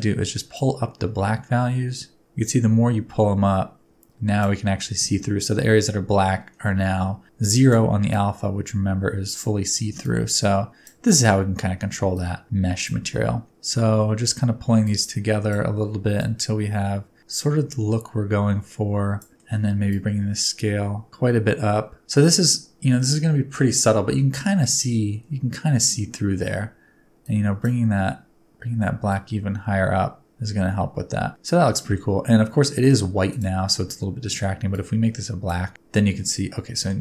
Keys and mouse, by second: 0.5-4.4 middle drag, 7.4 middle click, 8.1-9.3 middle drag, 10.0-10.8 middle drag, 12.1-12.8 middle drag, 13.5 middle click, 14.8 middle click, 16.1-19.1 right drag, 19.3 middle click, 19.8-22.0 right drag, 27.3 right click, 29.0-31.5 middle drag, 31.8 middle click, 33.3 middle click, 36.8 middle click.